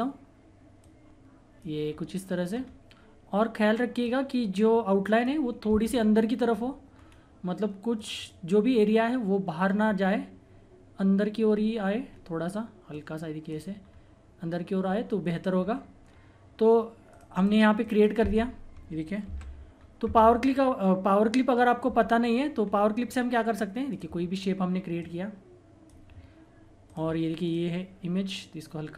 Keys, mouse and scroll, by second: 0.8 click, 1.8-2.5 scroll down 1, 2.6-4.0 scroll up 1, 4.0-6.2 drag, 6.2 scroll down 1, 7.9 click, 8.7-9.8 scroll down 1, 10.0-11.6 scroll up 1, 12.1 scroll up 1, 12.2-12.9 scroll down 1, 12.9 click, 13.8 scroll down 1, 17.1 click, 19.3 ctrl+z, 19.7-20.7 scroll down 1, 22.2-22.6 scroll down 1, 22.6-23.9 scroll up 1, 23.9-26.8 drag.